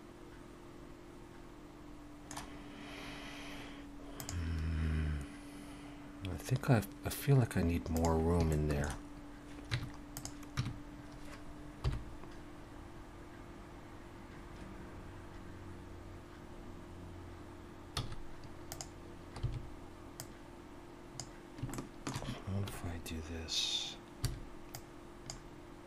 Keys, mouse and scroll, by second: 8.5 shift+middle click, 9.7 Tab, 10.2 click, 10.6 Tab, 11.8 KP_7, 12.9 scroll up 1, 18.0 z, 19.4 b, 21.7 shift+middle click, 24.2 b.